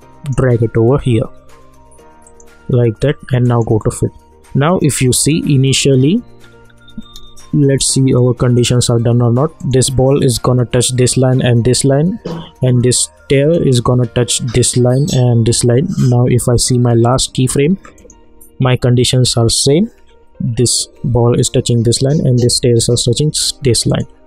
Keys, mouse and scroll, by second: 6.4-6.7 scroll up 1, 7.2 space, 7.3 click, 7.6 space, 9.6 click, 13.4 click, 16.5-18.1 drag, 23.9 click.